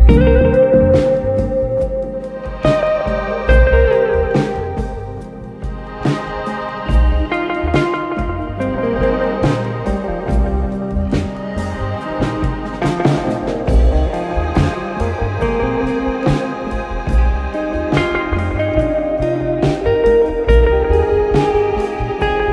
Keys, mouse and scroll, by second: 0.0 Tab, 0.6 click, 1.3 click, 3.1 click, 3.7 Tab, 4.7 click, 5.9 Tab, 6.8 click, 9.2 ctrl+z, 10.1 click, 15.9 alt+click, 17.7 click, 18.5 click, 19.1 shift+click, 19.7 shift+click, 20.0 shift+click, 20.6 shift+click, 21.0 shift+click, 22.0 ctrl+b.